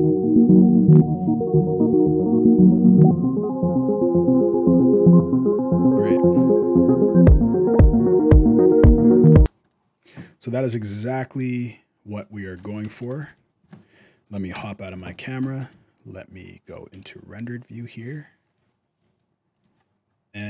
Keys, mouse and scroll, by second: 9.1 space, 9.4 click, 13.0 shift+Left, 14.3 KP_0, 15.0 scroll up 2, 15.2 shift+middle click, 15.5 z, 18.9 shift+middle click, 18.9-19.3 shift+scroll up 1, 19.6-20.4 scroll up 4.